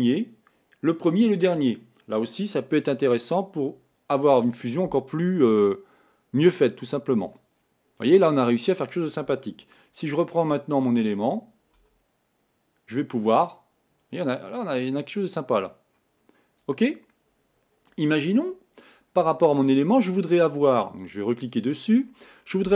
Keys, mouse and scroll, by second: 3.4 click, 5.6-8.7 drag, 10.9 click, 12.1 r, 21.6 click.